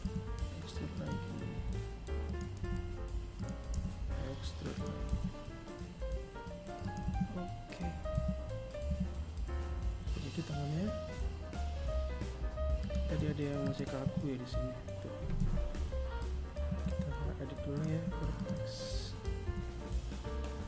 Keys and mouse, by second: 0.5 r, 1.7 e, 3.0 s, 4.9 a, 6.0 Tab, 6.8 z, 8.4 right click, 10.7 right click, 11.1 Tab, 11.5 right click, 11.9 Tab, 13.2 KP_3, 14.7 ctrl+Tab, 16.2 right click, 17.3 g.